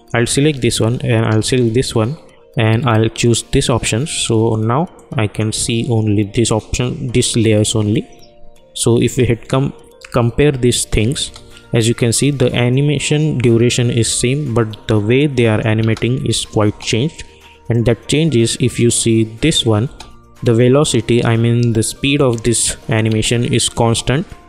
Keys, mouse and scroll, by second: 1.2-8.7 shift+drag, 9.0 space, 15.1 click, 15.8 space, 17.7 click, 19.8 space, 23.0 space.